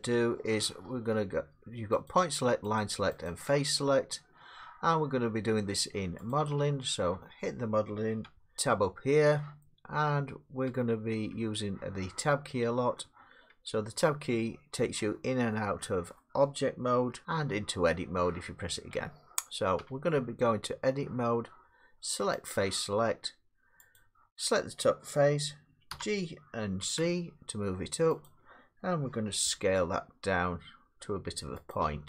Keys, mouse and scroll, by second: 2.1 click, 2.8 click, 3.4 click, 6.3 click, 8.3 Tab, 10.2 Tab, 10.7 Tab, 11.5 Tab, 13.5 Tab, 17.1 Tab, 19.0 Tab, 19.8 Tab, 22.5 click, 24.0 click, 25.9 g, 26.9 z, 28.3 click, 29.6 s.